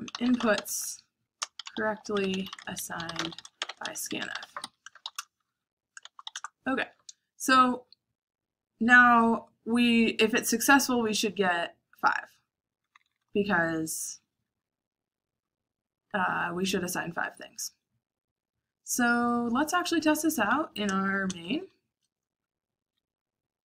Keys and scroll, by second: 0.0-10.3 typing, 12.4 typing, 16.1-18.0 typing, 19.4-23.5 typing.